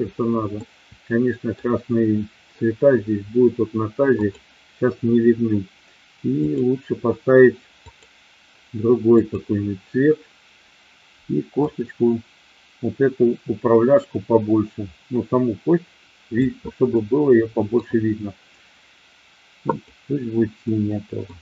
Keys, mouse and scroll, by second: 0.6-1.5 middle drag, 4.1 click, 6.4-8.0 drag, 9.0 click, 11.5-16.3 drag, 16.9-17.8 middle drag, 19.8 click, 20.6-21.3 middle drag.